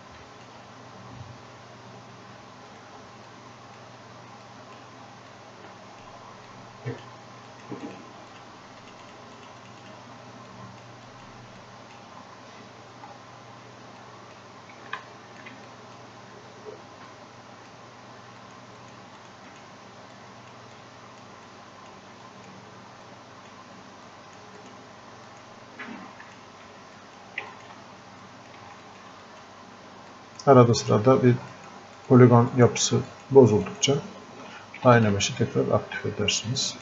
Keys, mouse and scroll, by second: 2.7 right click, 3.6 click, 4.8 click, 5.6 click, 10.5-12.8 drag, 12.8-13.4 scroll up 1, 13.4 scroll down 1, 14.0 click, 15.0 alt+click, 15.7-20.8 drag, 20.8 click, 21.5-24.1 drag, 24.1-27.0 drag, 28.3 click, 35.8 scroll up 1, 36.5 click.